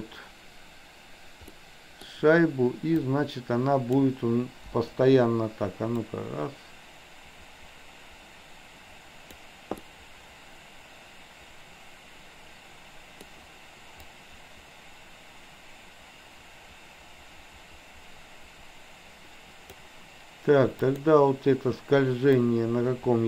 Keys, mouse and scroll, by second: 1.5-2.0 middle drag, 3.0-4.0 drag, 4.8 Delete, 6.0-9.4 drag, 9.8-13.3 middle drag, 14.2-19.8 drag, 20.9 click, 22.5-23.2 drag.